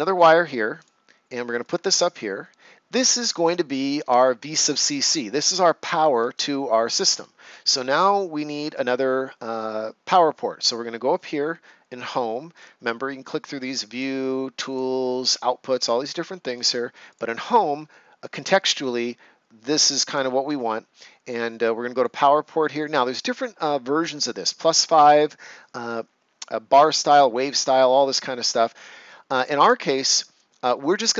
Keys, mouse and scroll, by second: 2.1 right click, 3.9 Escape, 5.9 ctrl+scroll down 1, 6.3 right click, 12.5 click, 21.9 click.